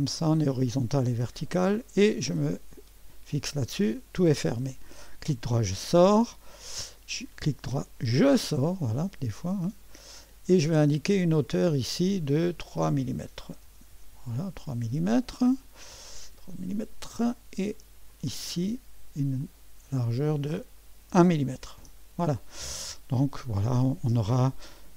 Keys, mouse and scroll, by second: 0.0 click, 2.7 click, 4.8 right click, 8.1-9.9 right drag, 9.9 click, 11.8 click, 13.4-14.1 typing, 16.7-20.0 drag, 20.8-21.6 typing, 21.8 Return.